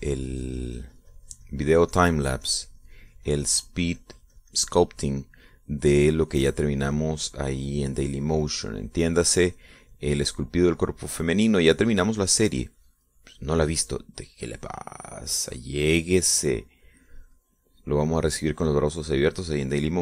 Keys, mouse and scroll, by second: 1.0-6.2 drag, 7.6-16.2 drag, 16.3 middle click, 17.0-19.2 drag, 19.6-20.0 drag.